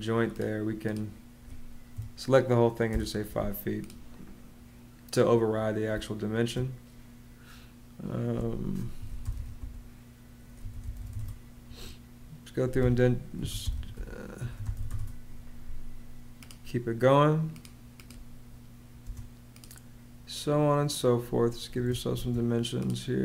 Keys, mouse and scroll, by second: 1.7 5, 2.7 click, 5.7 space, 8.5-11.4 typing, 12.6 Escape, 12.9-15.2 typing, 18.8 space, 21.5 Escape, 22.0 space.